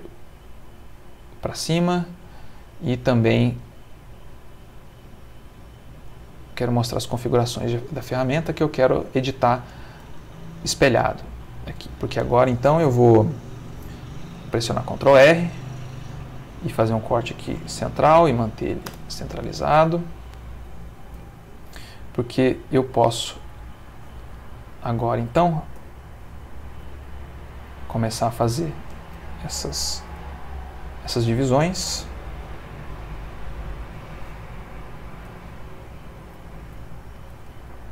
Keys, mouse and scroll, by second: 0.3 click, 3.6 right click, 6.1 click, 8.4 click, 9.7 click, 10.3 g, 11.9 Escape, 14.2 ctrl+r, 16.4 click, 18.0 0, 18.9 Return, 19.7 click, 21.1 g, 21.7 z, 23.3 click, 23.9 click, 25.8 g, 26.7 x, 27.6 click, 30.0 ctrl+r, 33.7 click, 35.3 0, 35.6 click, 37.1 ctrl+r.